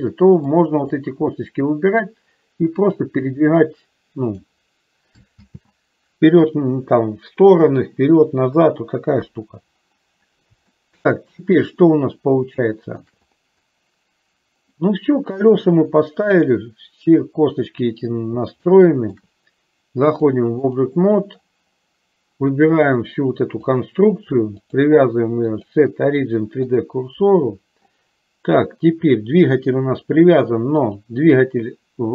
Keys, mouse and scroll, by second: 0.6 click, 3.2-4.6 drag, 5.6 ctrl+z, 9.4 KP_3, 10.9-13.3 shift+middle drag, 18.7 shift+middle click, 20.1 click, 23.1 click, 24.7-27.2 drag, 30.8 click.